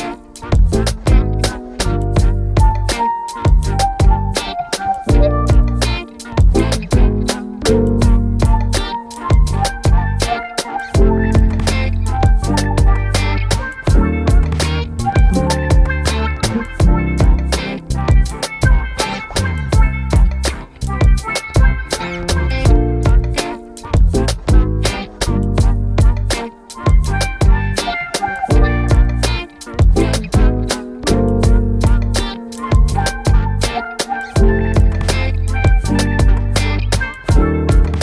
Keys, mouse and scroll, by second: 7.0 ctrl+Num_Lock, 7.0-9.6 shift+drag, 9.6 ctrl+d, 11.4 v, 12.3-17.7 drag, 17.7 click, 20.7 click, 23.4-29.8 drag, 29.8-32.1 drag, 34.1 ctrl+t, 35.9-38.0 drag.